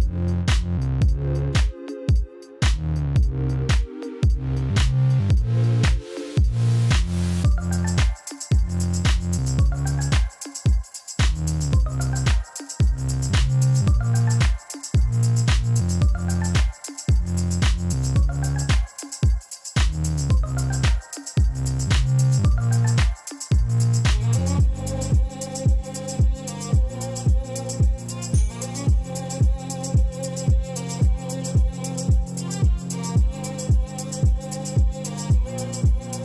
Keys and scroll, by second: 1.3 Tab, 2.0 g, 2.3 z, 4.2 Tab, 4.7 shift+z, 7.7 3, 16.9 e, 18.8 ., 19.1 7, 19.6 Return, 22.7 p, 28.4 m, 28.4 a, 28.6 d, 30.5 r, 30.6 i, 30.7 d, 31.4 Return.